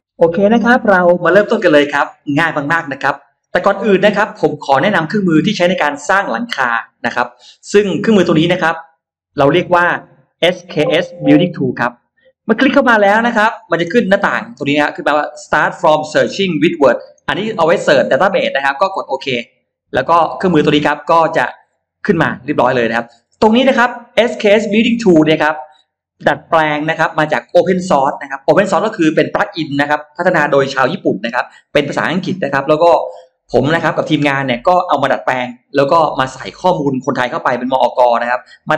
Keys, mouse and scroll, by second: 9.1 click, 10.3 click, 19.3 click, 20.5-21.5 drag, 22.7-25.1 drag.